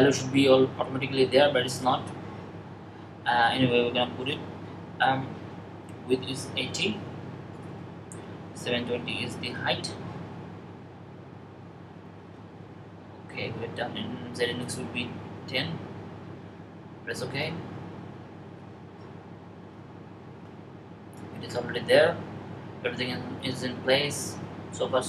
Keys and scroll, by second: 6.1-6.9 typing, 11.9 typing, 15.1-15.8 typing.